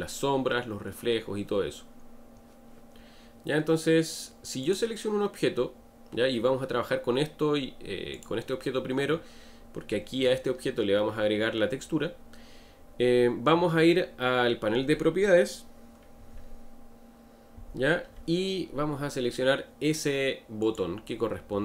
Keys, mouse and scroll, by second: 4.6 click, 8.1 click, 20.6 click.